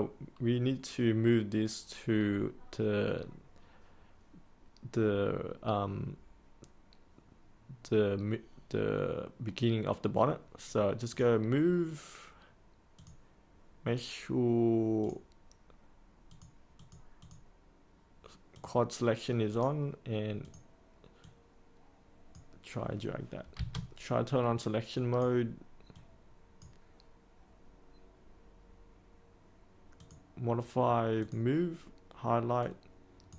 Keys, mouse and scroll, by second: 23.5 space, 24.9-33.3 drag.